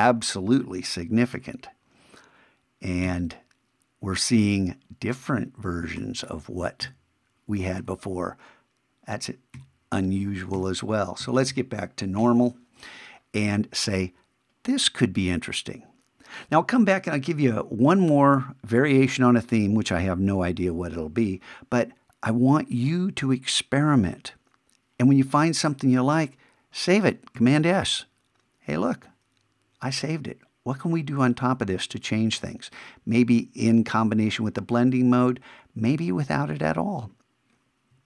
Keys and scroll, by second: 1.3 shift+=, 6.0 shift+=, 7.8 shift+-, 9.5 shift+=, 27.4 super+s.